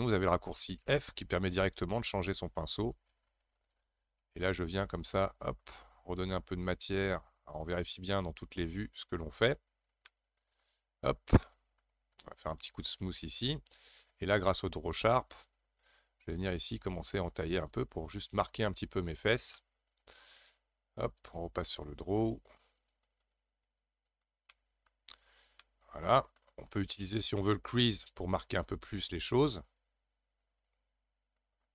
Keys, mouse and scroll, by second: 0.8 f, 2.9-7.0 drag, 7.0-8.2 middle drag, 8.2-10.1 drag, 10.1-12.2 middle drag, 12.2-18.4 shift+drag, 18.4 middle click, 19.1 shift+click, 19.5-21.0 middle drag, 21.0 click, 21.6-22.2 scroll up 1, 22.2-24.5 drag, 24.5 middle click, 25.0-25.6 scroll down 4, 25.6-28.7 middle drag.